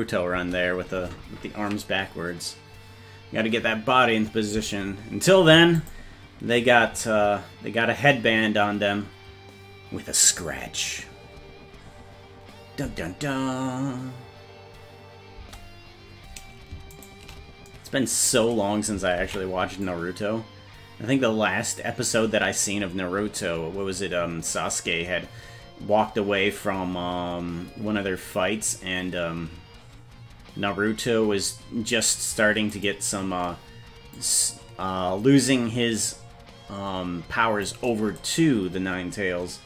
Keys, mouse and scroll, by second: 0.4 space, 5.8 click, 12.9 space, 15.4 space, 17.0 shift+right click, 19.4 ctrl+s, 19.9-21.8 drag, 32.8 right click, 34.2-37.7 drag.